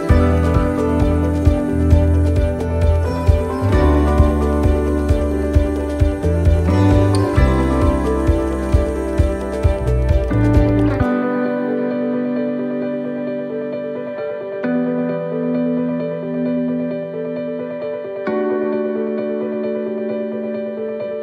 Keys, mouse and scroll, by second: 1.2 shift+middle click, 2.6 right click, 3.0 shift+middle click, 4.0 shift+right click, 4.3 right click, 4.6 right click, 5.0 right click, 5.4 right click, 6.3 c, 11.9 ctrl+r, 13.6 c, 16.3 click, 17.7 c.